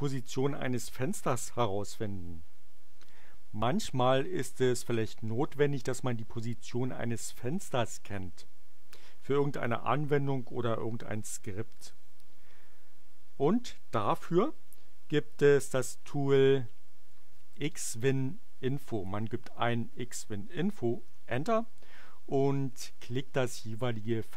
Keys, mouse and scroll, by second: 16.7-19.7 typing, 21.0 Return.